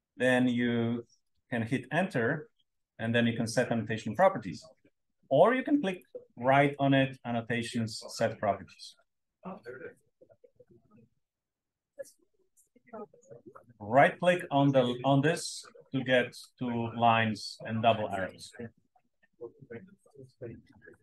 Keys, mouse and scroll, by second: 2.1 Return, 5.8 click, 14.2 click.